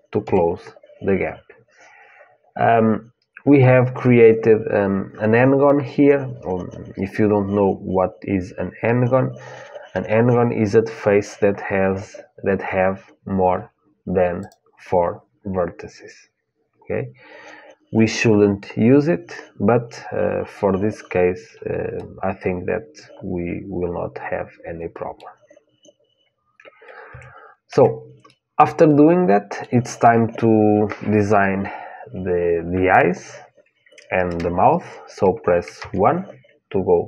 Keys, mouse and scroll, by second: 0.0 f, 14.2-16.2 drag, 21.7-23.9 middle drag, 26.8 Tab, 27.5 Tab, 28.1-35.5 middle drag, 35.5 KP_1.